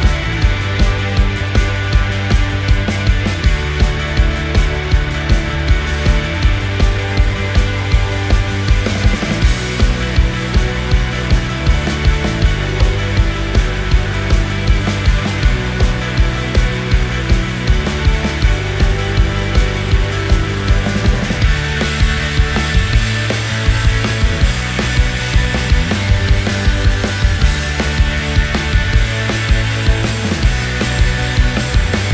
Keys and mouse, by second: 0.4 ctrl+a, 1.1 Tab, 1.5 2, 2.6 click, 5.5 ctrl+r, 7.9 1, 8.3 click, 9.8-10.2 drag, 9.8-10.2 right drag, 10.9 click, 11.7 click, 11.7 right click, 13.3 click, 13.3 right click, 13.9 ctrl+click, 13.9 ctrl+right click, 14.3 shift+click, 14.3 shift+right click, 15.7 click, 15.7 right click, 16.7 click, 17.1-18.5 drag, 17.1-18.5 right drag, 18.8 ctrl+click, 18.8 ctrl+right click, 19.6 shift+middle click, 20.1 middle click, 22.3-23.8 middle drag, 24.1 Tab, 24.9 g.